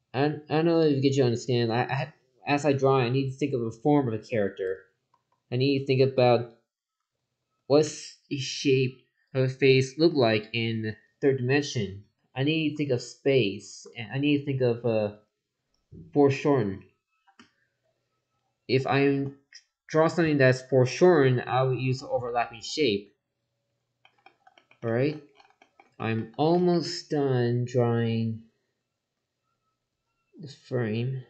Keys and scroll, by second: 4.4 ctrl+z, 12.7 ctrl+z.